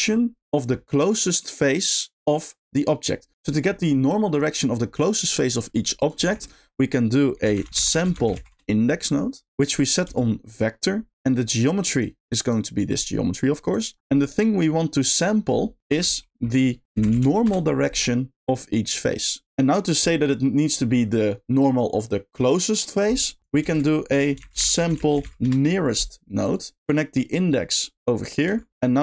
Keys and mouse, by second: 6.3 shift+a, 9.9 click, 11.6 middle click, 11.8 click, 12.5 click, 12.7-13.5 drag, 13.7 click, 14.0 middle click, 15.9 shift+a, 18.4-18.9 drag, 23.4 click, 23.6 shift+a, 26.8-27.7 drag, 28.2 click, 28.8 middle click, 28.8 g.